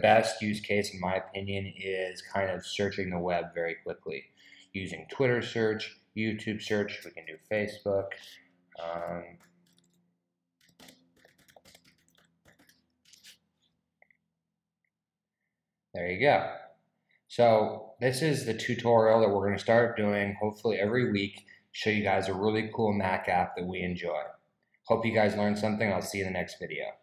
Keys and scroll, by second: 7.0-13.1 typing.